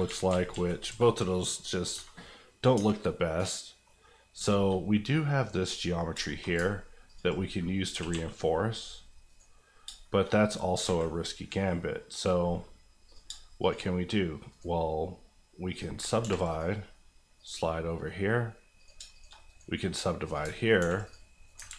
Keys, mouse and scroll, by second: 1.5 middle click, 1.9 Tab, 2.2 middle click, 2.7 Tab, 3.0 middle click, 4.1-5.6 scroll up 4, 4.5 shift+middle click, 5.6 click, 6.0 scroll down 2, 6.2 shift+middle click, 6.4 middle click, 6.7 ctrl+middle click, 7.1 ctrl+click, 7.4 click, 7.9 g, 8.1 g, 9.2 right click, 9.7-10.8 scroll up 4, 10.0 shift+middle click, 10.8 alt+a, 12.1-12.5 scroll down 1, 12.5-13.0 scroll up 1, 13.0 click, 13.2 shift+click, 13.9 click, 14.5 right click, 15.7 click, 16.1 ctrl+click, 16.2 ctrl+r, 16.5 click, 17.8 middle click, 18.8 click, 18.9 shift+click, 19.3 click, 19.4 right click, 20.2 click, 20.4 ctrl+click, 20.8 ctrl+r, 21.0 click, 21.4 right click, 21.6 ctrl+right click, 21.6 ctrl+z.